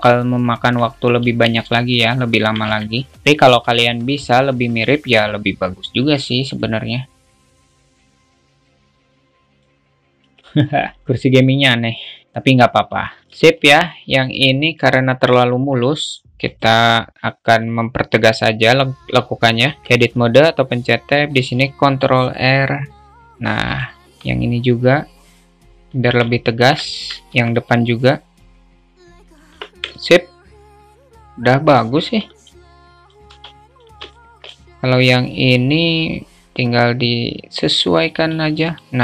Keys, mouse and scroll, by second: 0.0 alt+z, 1.7 alt+shift+middle click, 3.1 alt+z, 8.1 click, 9.0-10.0 drag, 10.5 alt+Tab, 10.5-11.0 alt+middle drag, 12.4-12.8 alt+middle drag, 13.6 shift+middle click, 14.1-14.5 alt+middle drag, 14.8 alt+shift+middle click, 16.8 click, 21.6 ctrl+r, 26.6 alt+middle click, 27.8 ctrl+r, 29.8 Tab, 30.2-32.7 alt+middle drag, 33.2 click, 34.4-34.7 shift+middle drag, 36.7-38.6 drag.